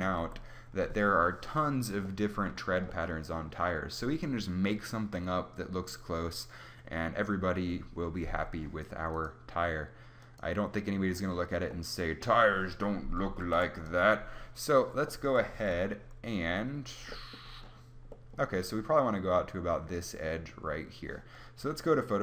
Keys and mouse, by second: 0.1 Tab, 13.3 ctrl+s, 15.4 Tab.